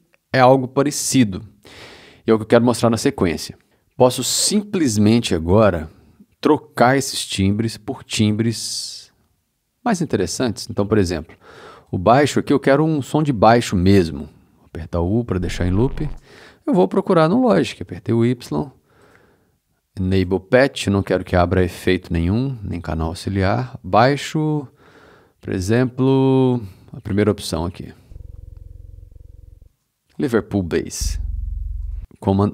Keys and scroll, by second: 14.8 u, 17.5 y, 27.9 space, 29.6 space, 30.9 space, 32.4 super+a.